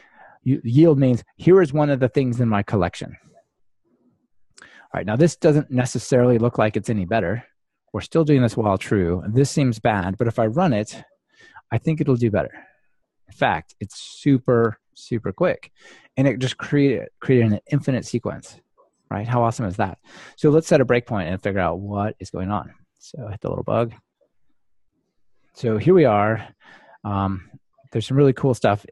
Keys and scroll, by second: 5.3 alt+super+l, 12.4 ctrl+r, 22.1 super+F8, 23.5 ctrl+d.